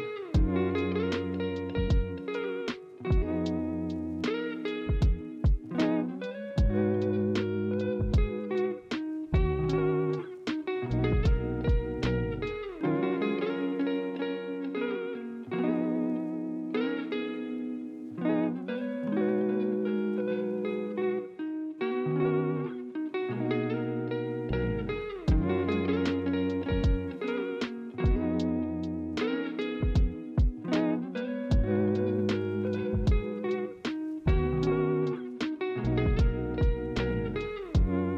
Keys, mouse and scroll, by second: 1.3 ctrl+z, 4.3 ctrl+z, 15.5 ctrl+z, 23.2 alt+Tab.